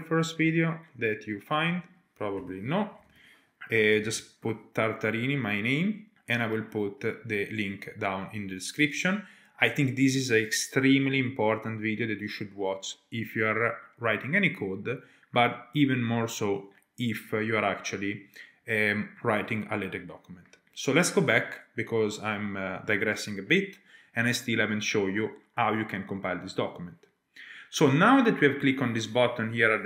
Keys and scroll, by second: 2.3-4.5 typing, 21.1 alt+Tab.